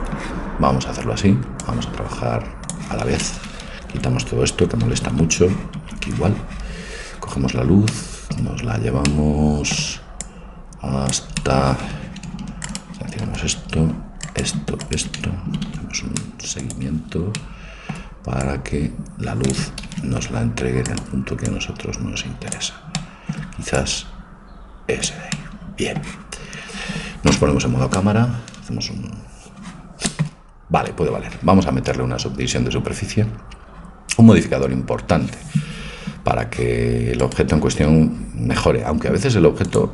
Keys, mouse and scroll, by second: 1.6-3.5 drag, 4.0-5.9 typing, 10.3-13.1 drag, 10.3 right click, 11.4-16.7 right drag, 15.6 ctrl+t, 17.4-18.4 middle drag, 18.4-20.3 drag, 18.4 right click, 19.9 ctrl+z, 20.9-22.8 right drag, 21.5-23.1 drag, 23.1 middle click, 23.8-25.5 drag, 23.8 right click, 25.4 right click, 25.5-27.4 middle drag, 27.4 KP_0, 37.2-39.1 right drag, 39.6-39.9 drag.